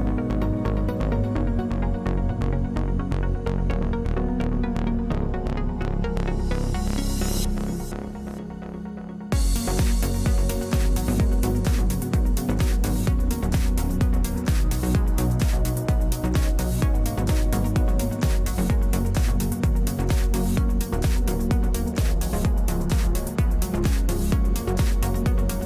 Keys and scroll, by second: 6.2 space, 7.1 space, 16.2 space, 16.7 space.